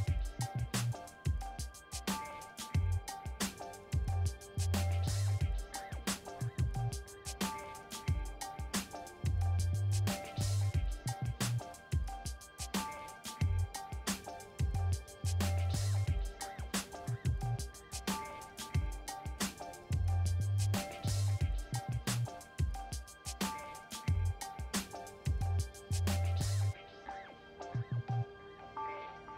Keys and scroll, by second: 10.3 5, 12.3 Return, 24.7 ctrl+t, 27.3 Return.